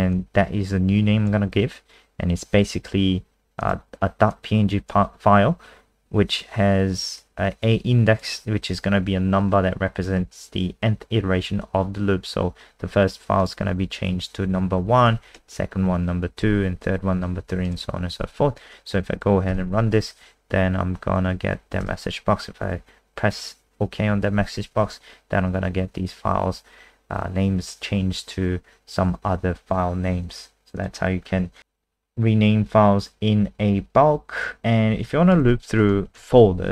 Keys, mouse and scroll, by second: 15.3 Down, 17.6 click, 18.1 ctrl+s, 19.5 F5, 21.8 Return, 30.8 click, 31.2-33.5 scroll down 7, 34.4 click, 35.4 ctrl+c, 35.8 click, 36.1 ctrl+a.